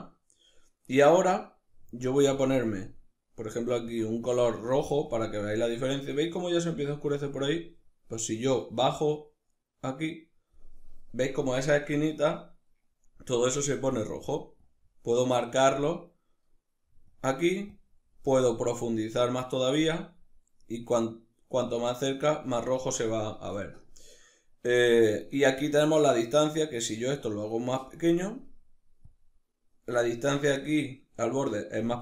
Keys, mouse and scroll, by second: 0.0-2.0 middle drag, 2.0-2.6 drag, 7.8-11.1 drag, 11.1-14.2 middle drag, 14.2-16.7 drag, 16.9 click, 17.4-29.3 drag.